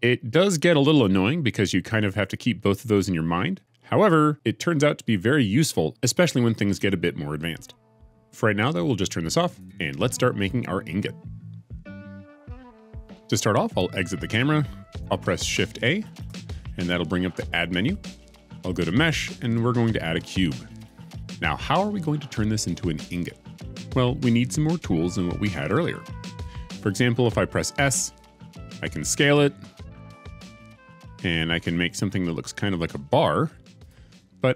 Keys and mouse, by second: 14.5-14.9 middle drag, 16.1 shift+a, 28.1 s, 29.7 x, 30.2 shift+x.